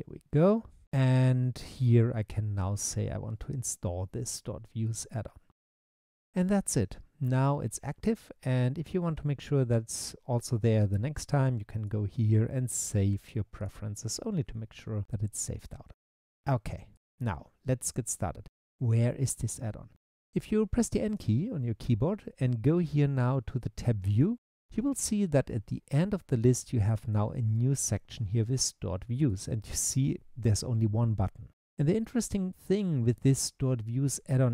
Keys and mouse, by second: 21.2-24.3 drag, 29.3 click.